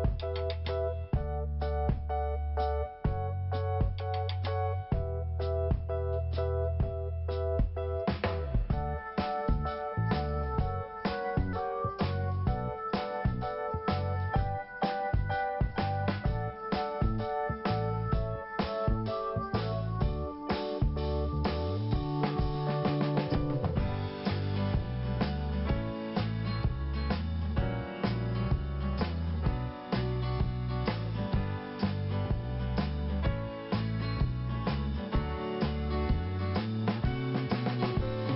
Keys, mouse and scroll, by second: 2.0 click, 2.1 click, 2.2 click, 2.3 click, 2.4 click, 2.4 double click, 2.5 double click, 2.6 double click, 2.7 double click, 2.8 double click, 2.9 double click, 3.0 double click, 3.9 right click, 4.6 click, 4.9 scroll down 1, 5.6 click, 6.0 click, 9.2 click, 9.3 click, 10.2 click, 10.3 click, 12.5 click, 14.7 scroll down 2, 15.6 scroll up 1, 17.3 click, 20.3 scroll down 1, 21.9 scroll up 2, 25.4 scroll down 1, 26.5 scroll up 1, 30.8 click, 32.4 scroll down 1, 33.8 click.